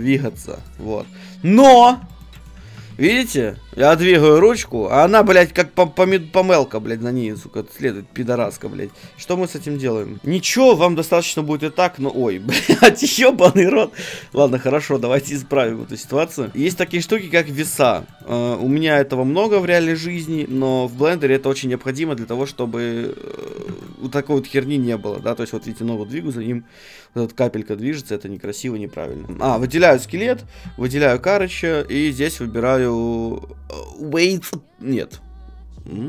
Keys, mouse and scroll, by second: 0.2 middle click, 0.3-3.6 right drag, 0.8 g, 2.7 g, 3.6 middle click, 6.4-8.4 right drag, 7.2 g, 8.8-10.2 right drag, 9.1-12.1 middle drag, 10.6-12.6 right drag, 10.8 r, 14.0-16.0 right drag, 14.2-22.6 middle drag, 16.5 ctrl+Tab, 22.4-27.5 right drag, 23.6 ctrl+Tab, 24.0 g, 28.4 right click, 29.3 ctrl+Tab, 29.3 middle click, 29.5 a, 29.7 click, 29.8-32.1 right drag, 32.1-35.6 drag.